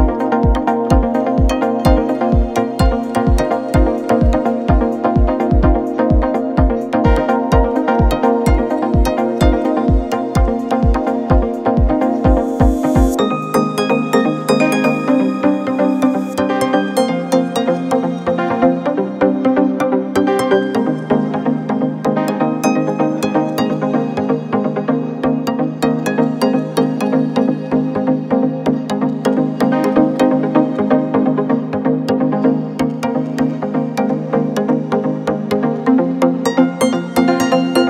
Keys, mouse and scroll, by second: 0.0 scroll up 2, 5.7 click, 6.4 scroll down 1, 7.1-9.4 scroll down 2, 10.2-11.7 middle drag, 11.7 KP_0, 12.5-13.6 scroll down 3, 13.6-14.9 shift+middle drag, 14.9 scroll down 2, 15.0-16.4 middle drag, 18.6-20.4 middle drag, 22.2-23.3 middle drag, 23.3 click, 26.9 scroll up 2, 27.2-27.5 scroll down 3, 29.9 click, 31.1 click, 36.6-37.0 drag, 37.3 click.